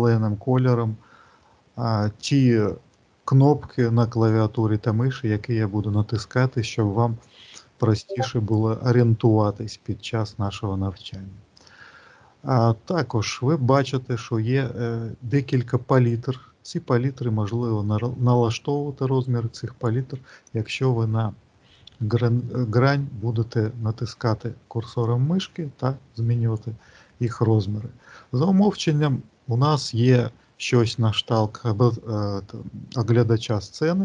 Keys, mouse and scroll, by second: 1.3 middle click, 17.5 click, 24.9 click.